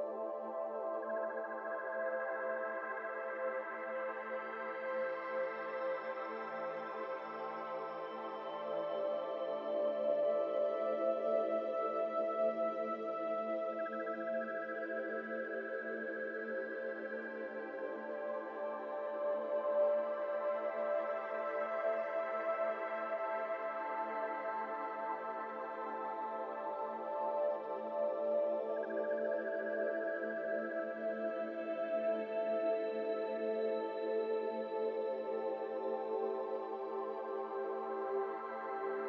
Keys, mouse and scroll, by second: 0.0-1.2 typing, 2.3 z, 2.3 z, 2.5 z, 2.6 middle click, 2.8-3.2 scroll down 3, 3.2-3.5 middle drag, 3.5 shift+a, 6.1 middle click, 6.3-6.7 scroll up 2, 6.7 s, 8.4 KP_7, 9.7 g, 10.2 g, 10.5 r, 14.8-15.7 middle drag, 15.7-19.0 typing, 21.4-22.0 middle drag, 22.0 r, 23.0 z, 23.0 z, 23.2-24.5 middle drag, 24.5-25.6 drag, 25.6 KP_0, 26.9 g, 28.2 z, 28.6 z, 29.0-29.7 middle drag, 29.7 KP_7, 31.0-33.6 typing, 34.3 click, 38.8-39.0 shift+middle drag.